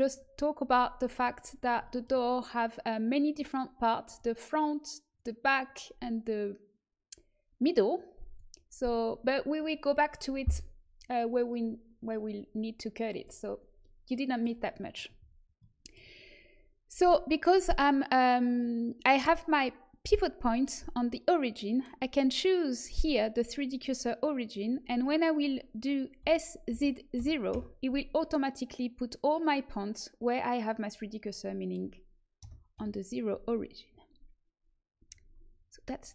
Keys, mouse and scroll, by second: 1.0 middle click, 4.0-12.1 drag, 14.9-17.8 middle drag, 20.1 middle click, 22.1 click, 24.1 middle click, 26.1 s, 30.9 middle click, 32.3 KP_0, 32.7 KP_1.